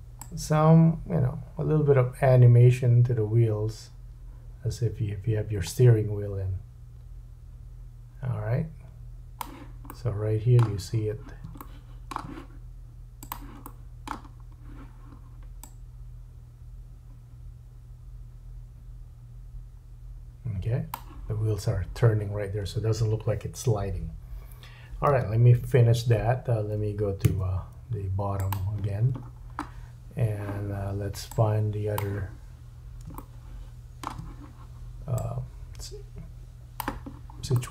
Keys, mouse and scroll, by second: 0.2 click, 1.0-2.8 drag, 5.7-7.8 middle drag, 9.8 middle click, 10.8-11.4 scroll up 3, 11.6 shift+middle click, 13.3-15.6 drag, 13.7 middle click, 14.3-14.7 scroll up 2, 25.7 1, 27.2 `, 29.2-30.3 scroll down 6, 31.3 click, 33.1 shift+middle click, 35.2 click, 37.1-37.4 scroll up 2, 37.5 shift+middle click.